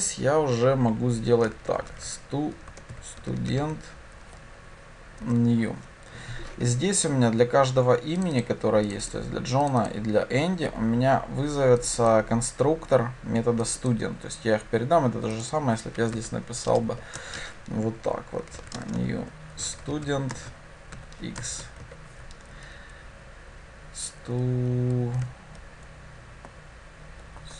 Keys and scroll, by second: 5.3 Return.